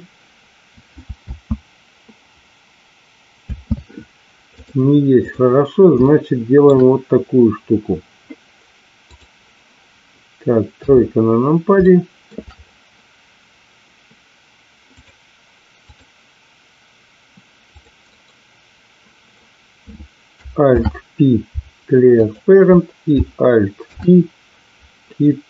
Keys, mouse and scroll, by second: 1.2 space, 4.5-5.5 drag, 6.1-6.6 shift+middle drag, 9.2-9.6 drag, 10.6 KP_3, 11.9-12.2 shift+middle drag, 18.0-19.5 right drag, 20.6 alt+p, 23.9 alt+p.